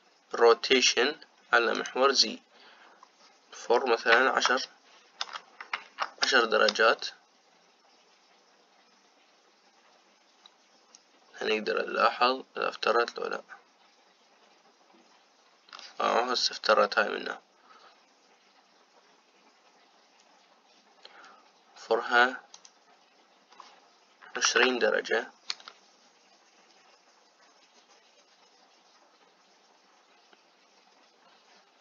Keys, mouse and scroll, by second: 2.4-5.5 drag, 23.5-31.8 drag.